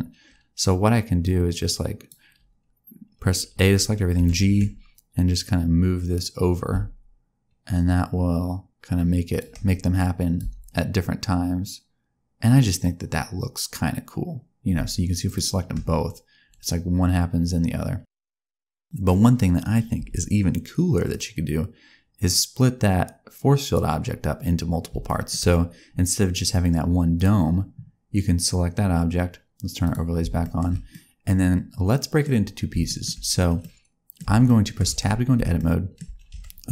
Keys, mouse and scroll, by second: 1.2 click, 4.1 g, 9.9 click, 10.3 space, 15.2 shift+click, 19.9 space, 21.0 click, 24.1-24.8 scroll up 2, 25.0 shift+middle click, 27.1 click, 29.8 click, 30.4 shift+middle click, 30.6 shift+scroll down 1, 30.8 middle click, 32.8 shift+middle click, 33.5 middle click, 34.4 shift+middle click, 34.8 Tab, 35.5 shift+middle click, 36.1 scroll down 1, 36.2 Tab.